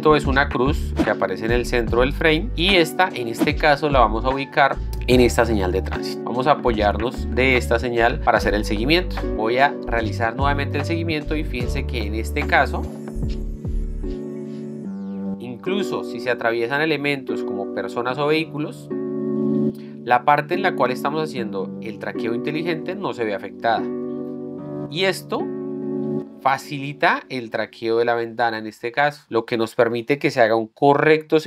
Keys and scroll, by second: 9.5 z.